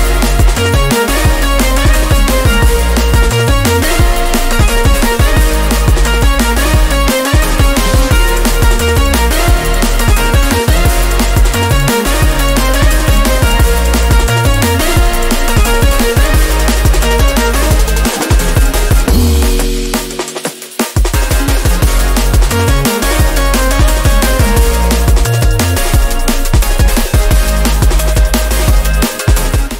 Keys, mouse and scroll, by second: 3.0 click, 3.0 typing, 5.6-8.4 drag, 5.6 typing, 16.7 click, 16.7 typing, 21.6 click, 21.6 typing, 22.7 right click, 24.4 click.